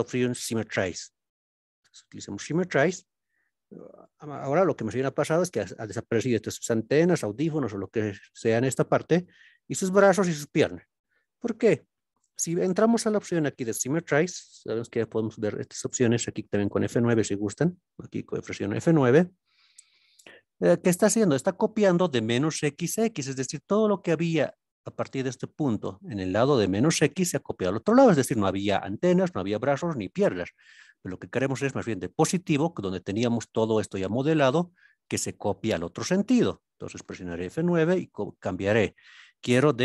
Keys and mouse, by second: 15.1 click.